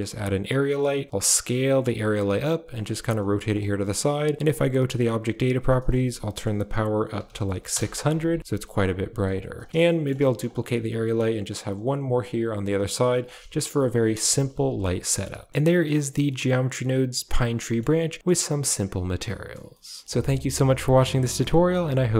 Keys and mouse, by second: 0.3-1.1 typing, 2.1 r, 2.7 g, 3.0 r, 4.3 click, 4.9 click, 5.7-7.6 drag, 7.2 0, 8.4-10.5 typing, 9.7 shift+middle click, 11.7-14.2 typing, 13.6 click, 15.4 shift+middle click, 16.2 middle click, 17.6 middle click, 18.2 middle click, 19.5 middle drag, 20.0 ctrl+s.